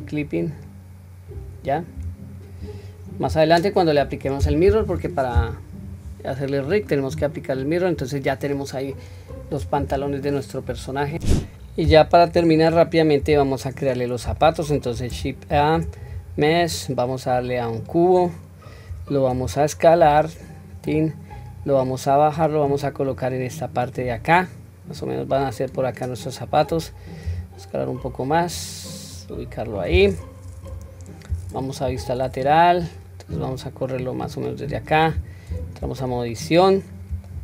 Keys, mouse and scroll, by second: 0.3 click, 2.0 Tab, 2.6-3.2 scroll down 1, 3.2-3.8 scroll down 2, 3.8-5.0 middle drag, 3.8-4.1 scroll down 2, 5.9 scroll down 1, 6.3-6.9 middle drag, 7.2 scroll up 1, 8.0-8.6 scroll down 1, 8.6 middle click, 8.6-8.9 scroll down 1, 9.6 ctrl+s, 12.6 click, 13.2 KP_1, 14.4-14.8 shift+middle drag, 15.5 shift+a, 21.6 click, 23.1-24.3 drag, 25.0-26.6 drag, 27.3 s, 29.1 click, 30.7 scroll up 1, 31.8 scroll up 2, 31.8 KP_3, 32.5 scroll down 1, 33.3-34.9 drag, 35.5 Tab, 36.1-37.1 scroll up 2, 37.1 scroll up 1, 37.3-37.4 shift+middle drag.